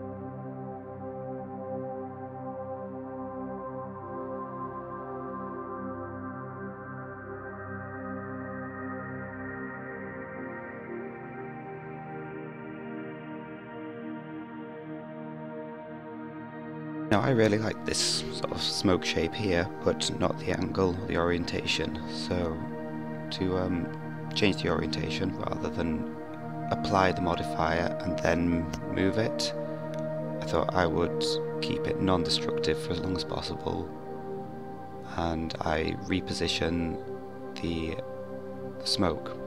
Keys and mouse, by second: 4.4-4.7 middle drag, 7.4-13.3 drag, 20.1-25.3 drag, 28.4 click, 29.9 KP_1, 32.2 click, 34.6-36.0 drag.